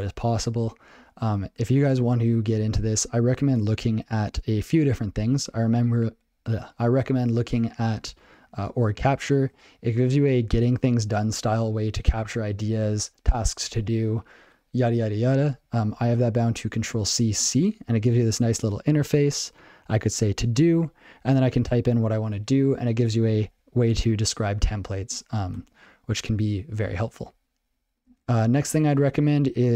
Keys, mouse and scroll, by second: 1.6 ctrl+n, 2.6 ctrl+n, 2.8 ctrl+n, 3.0 ctrl+p, 3.2 ctrl+a, 3.5 Tab, 7.7 ctrl+alt+space, 7.8 Tab, 8.3 ctrl+g, 8.4 ctrl+alt+space, 9.1 alt+f, 9.3 alt+f, 9.4 alt+f, 9.9 alt+b, 10.3 alt+f, 10.6 alt+f, 25.8 ctrl+k, 28.0 ctrl+n, 28.2 ctrl+a, 29.1 ctrl+alt+space, 29.5 ctrl+g.